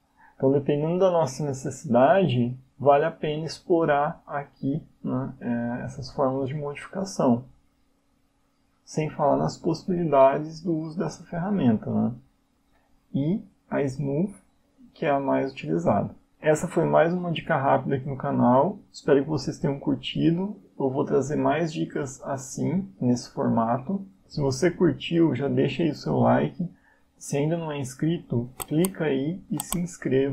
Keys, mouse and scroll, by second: 0.0 click, 3.9 click, 4.1 click, 5.4 click, 7.5 click, 8.7 click, 11.3 click, 13.4 click, 16.1 click, 18.6 click.